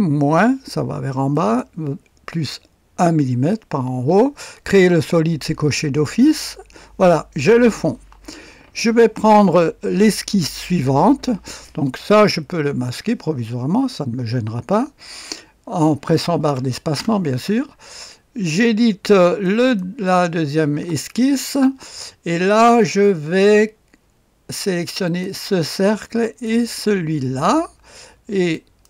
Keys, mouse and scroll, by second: 1.3 click, 6.3 click, 12.0 click, 12.9 space, 16.6-16.9 typing, 19.4 click, 19.6 click, 20.6 typing, 25.0 click, 26.2 click, 28.5 click.